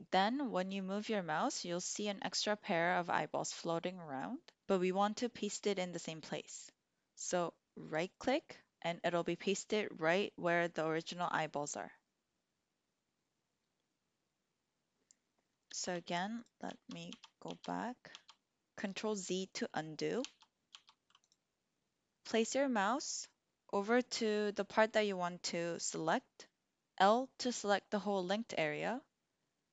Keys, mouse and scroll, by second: 7.9 click, 15.9-18.0 ctrl+z, 20.1 ctrl+z, 20.6 ctrl+z, 21.2 click.